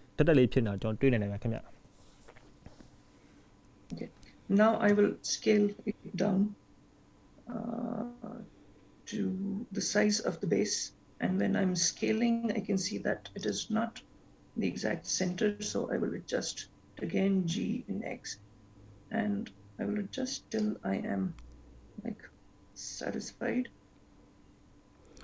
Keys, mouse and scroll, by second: 5.1 s, 16.1 g.